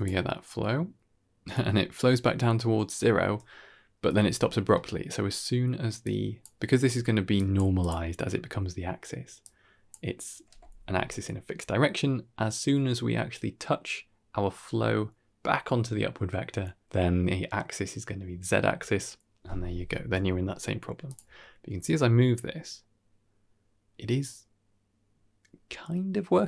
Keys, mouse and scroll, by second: 4.6 middle click, 5.9 click, 7.3 drag, 7.5 g, 8.1 d, 9.3-9.8 drag, 19.8 g, 21.5 g.